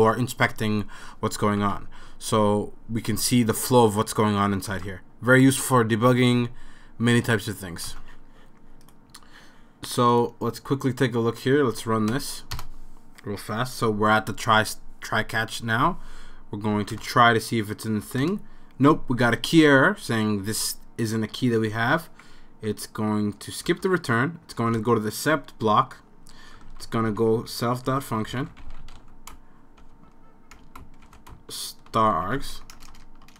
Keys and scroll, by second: 1.6 super+s, 4.7 super+s, 7.9 super+s, 9.1 super+s, 12.1 Up, 12.5 Return, 16.8 typing, 16.9 Return, 18.2 Return, 22.7 typing, 23.7 Return, 24.8 Return, 26.5-33.3 typing.